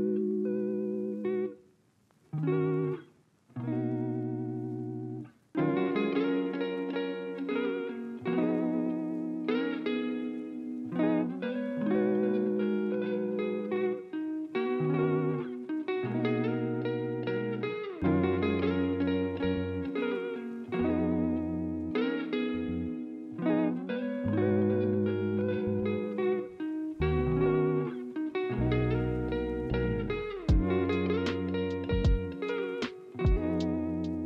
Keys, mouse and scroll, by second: 0.0 alt+scroll, 0.7 alt+scroll, 6.0-7.2 alt+scroll up 2, 10.5 ctrl+z, 10.5 alt+scroll, 10.7-11.0 alt+scroll up 2, 11.0 alt+scroll down 2, 11.7-12.5 alt+scroll, 24.5 ctrl+z, 28.0 ctrl+z.